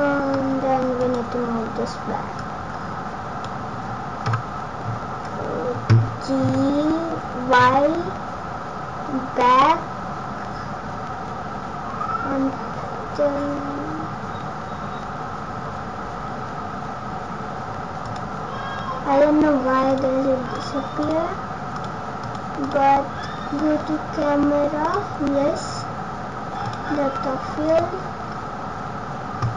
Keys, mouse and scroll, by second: 1.0 click, 2.3 click, 4.2 KP_0, 6.4 g, 19.8 click, 21.7 click, 24.8 click, 26.6 click, 28.2-28.7 scroll down 4.